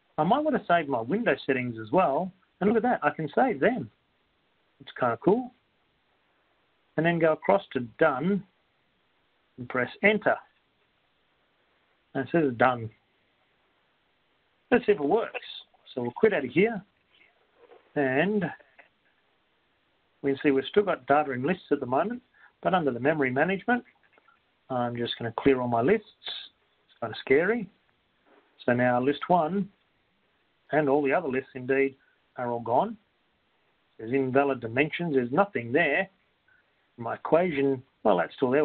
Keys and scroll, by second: 4.8 Return, 4.8 Up, 8.2 Down, 8.2 Right, 9.8 Return, 21.2 Return, 24.6 Return, 28.1 4, 29.4 Return, 31.1 Up, 32.9 Return, 34.9 2.